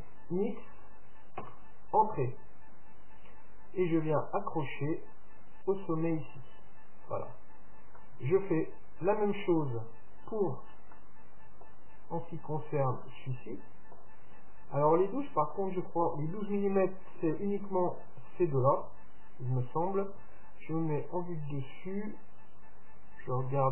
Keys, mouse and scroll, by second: 2.9-4.5 middle drag, 4.0-5.7 drag, 7.1-9.7 middle drag, 9.7 scroll up 1, 9.9-10.5 scroll down 1, 10.5-11.0 scroll down 1, 11.0-14.8 middle drag, 15.5-17.5 right drag, 18.0-19.9 right drag, 19.0-21.0 middle drag, 21.1 KP_7, 22.8-23.7 drag.